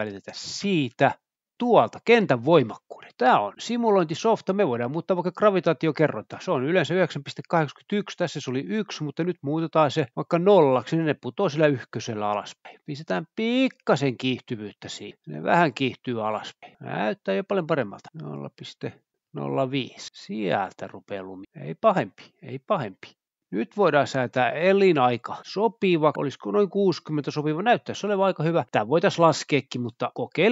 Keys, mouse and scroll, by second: 2.5 click, 3.1-4.6 scroll down 2, 5.0 click, 10.8 space, 12.0 click, 13.6 Return, 13.6 typing, 14.8 space, 17.2 space, 17.7 click, 19.2-20.9 typing, 20.6 Return, 22.4-23.1 scroll up 1, 23.1-23.8 scroll up 1, 24.3 click, 26.1 Return, 26.1-27.0 typing, 28.4-29.1 scroll down 1, 29.1-30.5 scroll down 1.